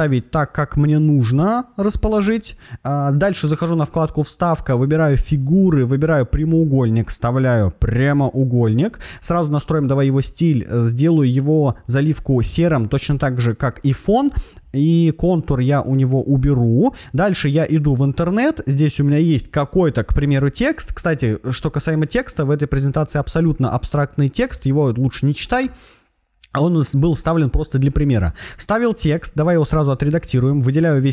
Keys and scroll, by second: 21.1 super+c, 24.4 super+v, 25.6 super+a, 29.9 super+a.